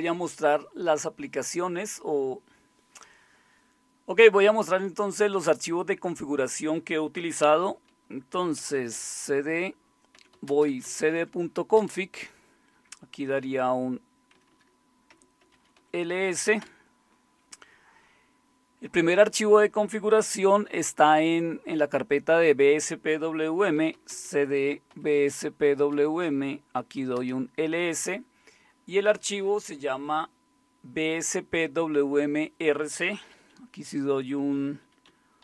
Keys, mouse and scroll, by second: 8.3-11.5 typing, 11.8 Return, 13.0-16.0 typing, 16.6 Return, 23.5-24.9 typing, 25.2 Tab, 25.8 Return, 26.5-27.7 typing, 34.8-35.4 typing.